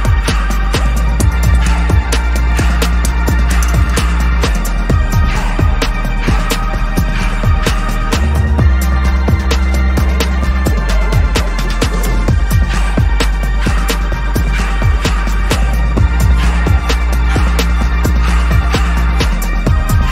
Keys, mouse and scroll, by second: 0.6 ctrl+=, 0.8 ctrl+=, 1.0 ctrl+=, 1.5 space, 2.4 ctrl+=, 2.7 space, 4.7 double click, 9.9 ctrl+-, 10.1 ctrl+-, 10.2 ctrl+-, 10.9 ctrl+-, 11.5 ctrl+=, 11.7 ctrl+=, 11.8 ctrl+=, 12.1 space, 13.1 p, 15.2 ctrl+=, 15.3 space, 15.5 double click, 15.8 space, 16.0 ctrl+=, 17.1 alt+click, 18.4 space, 18.4 double click, 18.5 space, 18.9 double click, 19.0 space, 19.7 alt+click, 19.9 ctrl+-.